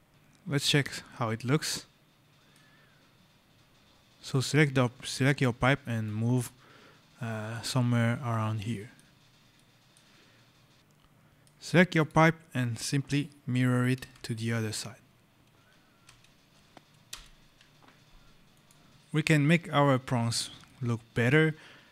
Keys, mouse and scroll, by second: 0.1 right click, 0.5 click, 1.2 right click, 2.8 scroll, 4.2 click, 8.2 right click, 9.0 scroll, 9.4 right click, 11.8 click, 13.5-14.5 typing, 15.9 Return, 16.7 x, 16.9 Return, 18.4 click, 18.9 right click, 20.5 right click.